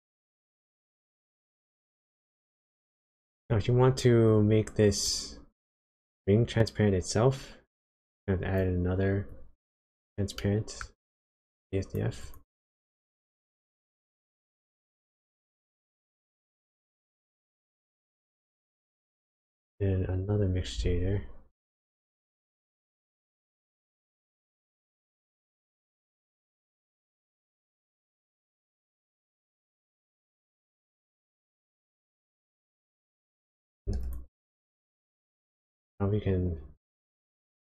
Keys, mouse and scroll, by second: 0.1 click, 0.4-1.0 scroll down 2, 1.0 middle click, 1.8-2.5 scroll down 2, 2.5 middle click, 4.3 click, 5.8 click, 5.8 shift+middle click, 5.8 scroll up 2, 6.6-7.8 scroll down 1, 7.9 click, 9.3 click, 10.3 middle click, 11.4 click, 12.1 click, 12.7 shift+a, 20.8 shift+a, 24.7 click, 27.4 click, 28.8 click, 30.4 click, 32.4 click, 34.1-34.4 ctrl+shift+click, 37.4-37.7 scroll up 3, 37.5 click.